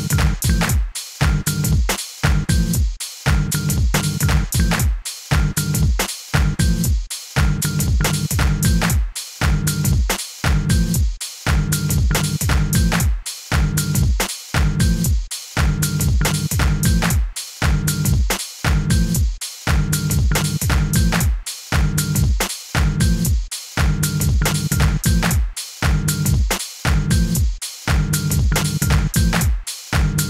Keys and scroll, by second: 0.0-0.3 typing, 1.6 super+r, 1.9-3.2 typing, 6.9 super+a, 7.8 super+u, 17.5 Up, 20.5 Up.